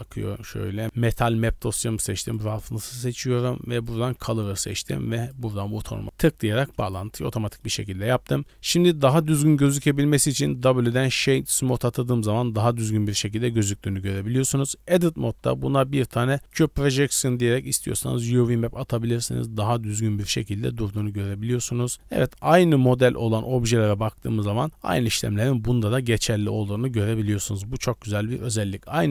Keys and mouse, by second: 6.6 middle click, 7.3 middle click, 8.9-9.7 shift+middle drag, 10.6 w, 11.7-12.9 middle drag, 13.3 middle click, 14.3 Tab, 15.7 u, 17.2 Tab, 17.4 middle drag, 17.9-19.0 middle drag, 21.9 middle click, 22.6 middle click, 26.0-26.5 middle drag.